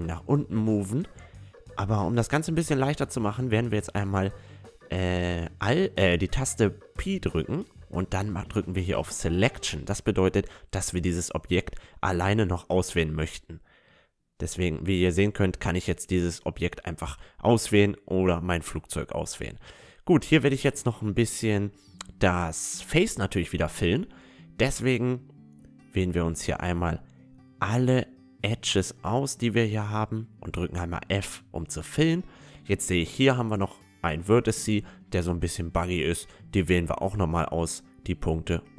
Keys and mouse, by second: 0.2 click, 0.2-1.4 right drag, 4.0 alt+p, 5.0 ctrl+z, 5.8 p, 9.0 a, 9.4 a, 9.6 middle click, 10.0-14.2 right drag, 10.6 a, 11.3 Tab, 11.7 a, 12.6-16.1 drag, 13.7 middle click, 16.5 Tab, 17.1 Tab, 17.3 right click, 17.6 a, 17.9 middle click, 18.3 click, 18.6 Tab, 19.0 right click, 19.1-20.4 middle drag, 20.6 middle click, 22.1-23.7 drag, 23.2 middle click, 23.7-28.4 middle drag, 23.8 click, 26.3-30.7 right drag, 29.2 f, 29.7 Tab, 30.0 middle click, 30.8 middle click, 32.3 Tab, 32.9 Tab, 33.3-38.3 right drag, 33.7 Tab, 36.8 x, 38.1 Tab, 38.3-38.7 middle drag.